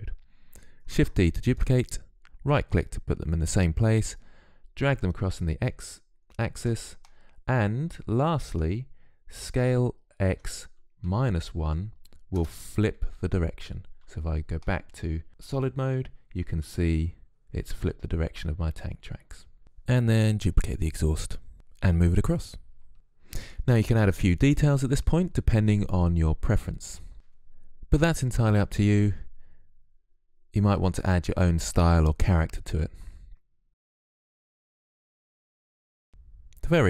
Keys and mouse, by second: 0.8 shift+d, 4.0-5.8 drag, 9.2 s, 13.9 z, 20.1 click, 20.2 shift+d, 21.0 click, 21.3 click, 21.5 middle click, 23.5 Tab, 23.6-30.2 typing, 23.7 click, 24.1 ctrl+z, 24.4 Tab, 25.7 Tab, 26.7 click, 27.3 click, 27.7 click, 27.9 ctrl+z, 28.0 Tab, 29.8 Tab, 30.0 Tab, 30.5 Tab, 31.3 click, 31.6 Tab, 32.8 Tab, 32.9 Tab, 33.1-35.1 typing, 33.9 Tab, 34.2 Delete, 34.9 Tab, 34.9 Tab, 35.7 Tab.